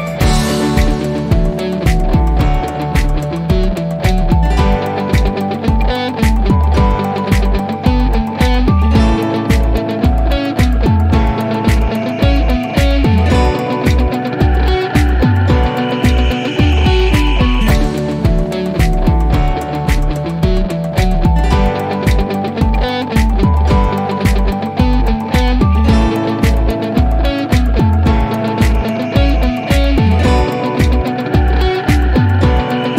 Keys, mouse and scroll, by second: 6.8 click, 11.9-14.8 drag, 19.2-20.5 typing, 22.2 click, 25.0 click, 28.6 click, 30.5 scroll up 1.